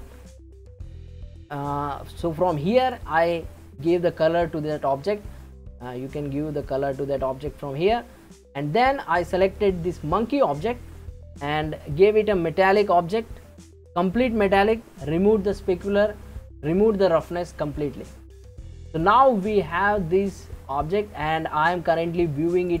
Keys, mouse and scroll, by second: 2.8 click, 9.2 click, 13.3-14.0 scroll down 3, 14.0-17.1 scroll down 1, 18.9 scroll up 1, 19.7-22.8 middle drag.